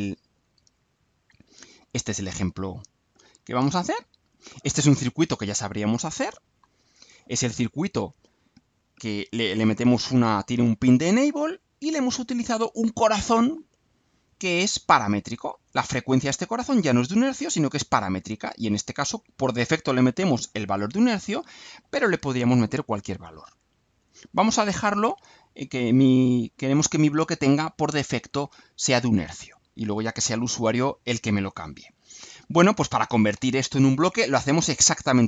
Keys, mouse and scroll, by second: 0.7-2.2 drag, 3.7 click, 5.8 click, 19.5 click, 25.2 click, 31.0 middle click, 31.7-32.8 scroll up 1.